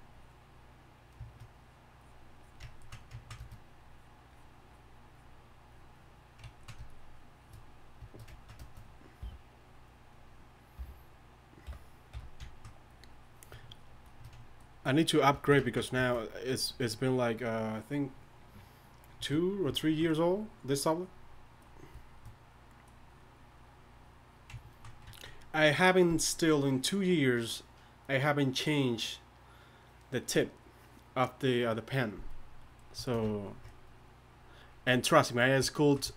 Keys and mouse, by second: 3.0 drag, 6.5-9.2 drag, 9.2 o, 10.8 o, 11.6 i, 12.1 f, 15.6 click, 15.8-19.5 drag, 22.5-32.5 drag, 33.9-36.1 drag.